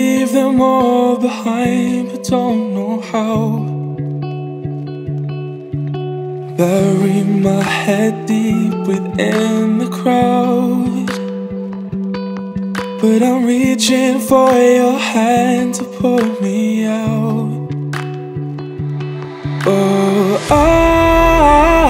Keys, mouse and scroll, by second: 6.0 Tab, 6.6 click, 6.9 click, 7.2-7.9 scroll down 1, 7.9 click, 8.9 click, 9.8-10.7 drag, 11.7-12.5 drag, 13.3-14.1 drag, 15.0-15.7 drag, 16.5-17.2 drag, 18.8 click.